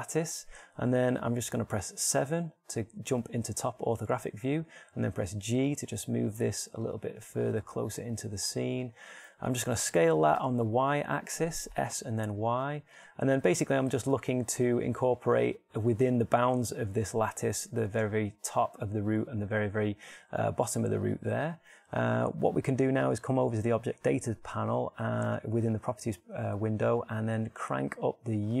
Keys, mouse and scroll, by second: 3.0 KP_7, 5.4 g, 7.8-11.7 drag, 8.3 g, 9.8 g, 10.5 s, 13.9-16.6 drag, 14.8 g, 21.8 g, 22.6 click.